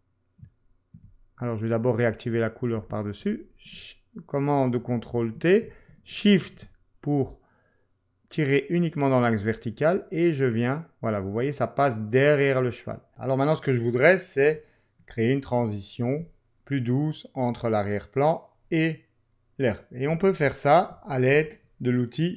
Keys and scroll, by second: 5.1 super+t, 14.5 z, 20.9 super+-, 21.3 super+-.